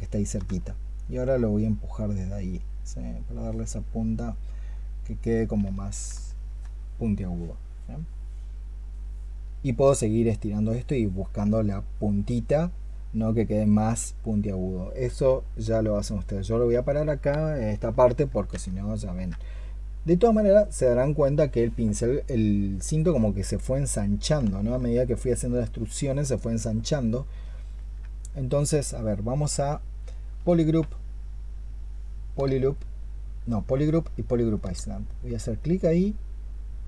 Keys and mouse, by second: 6.2 alt+click, 17.9 alt+click, 24.4 alt+click, 26.2 alt+click, 27.5 ctrl+click, 30.2-34.4 space.